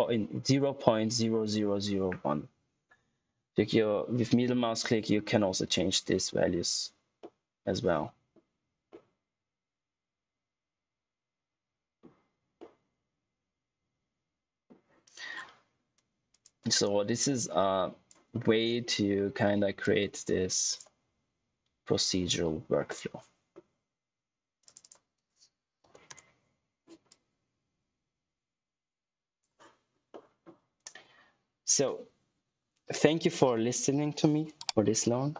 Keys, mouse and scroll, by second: 4.8 middle click, 7.4 typing, 9.1 middle click, 12.8 middle click, 15.2-15.6 scroll down 1, 15.6-16.1 scroll up 1, 16.2 click, 17.6 click, 18.3 middle click, 19.8 click, 22.8 middle click, 24.6 click, 27.0 click, 29.8 scroll down 1, 30.0 middle click.